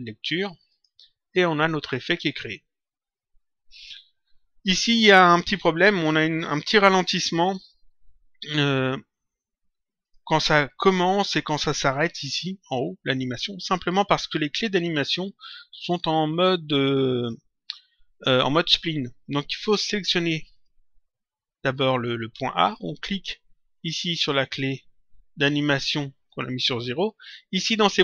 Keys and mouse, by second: 0.6 click, 9.9 click, 20.4 click, 24.0 click.